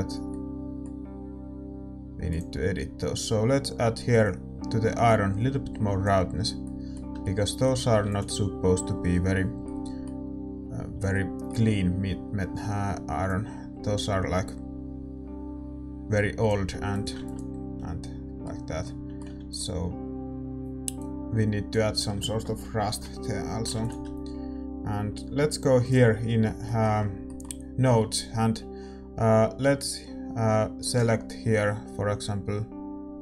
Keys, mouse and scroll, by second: 2.3-6.7 drag, 6.7-13.4 middle drag, 8.2 ctrl+s, 13.4-20.7 drag, 17.3 ctrl+s, 18.0-20.7 middle drag, 20.7 ctrl+s, 21.0-23.8 drag, 23.8 shift+F3, 23.8 ctrl+s, 23.8-26.0 middle drag, 26.0-33.2 drag.